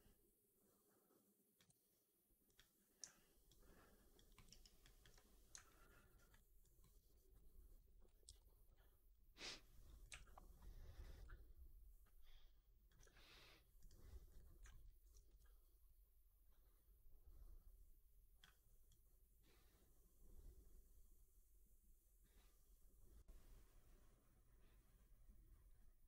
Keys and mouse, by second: 3.3-4.0 alt+drag, 4.2 alt+middle drag, 4.3 alt+right drag, 4.7 alt+click, 5.7 alt+right drag, 6.0 alt+right drag, 6.2 alt+click, 6.7 alt+middle drag, 7.0 alt+right click, 7.2 alt+click, 8.1 ctrl+d, 9.3 click, 9.9 e, 10.8-12.8 drag, 13.7 click, 14.1 click, 14.5 alt+middle click, 14.7 alt+right click, 15.1 w, 15.8-18.3 drag, 18.8-26.0 drag.